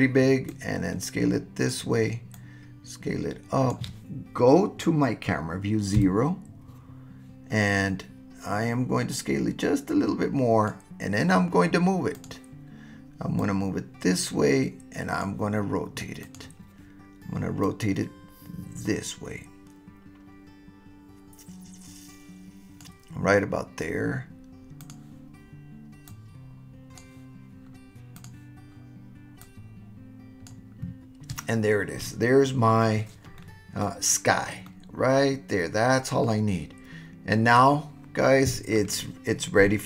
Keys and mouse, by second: 0.5-1.7 drag, 2.4-3.7 drag, 6.0 KP_0, 9.1 click, 9.2-10.7 right drag, 12.1 right click, 13.4-15.2 right drag, 16.3 right click, 17.6 right click, 17.9-22.8 drag, 24.8 click, 26.1-27.0 drag, 28.2 click, 29.4-30.5 drag, 33.4-33.8 middle drag, 34.7-35.7 middle drag, 35.8 click, 35.9-38.9 middle drag, 37.7-38.9 drag.